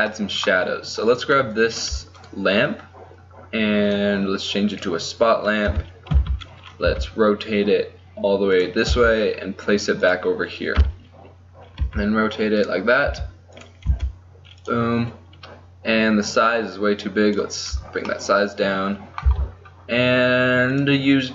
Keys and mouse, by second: 5.7 KP_7, 6.2 z, 7.0 r, 9.0 g, 10.9 KP_3, 11.9 r, 13.2 g, 14.0 r, 18.4 middle click, 19.4 z, 20.8-21.3 drag.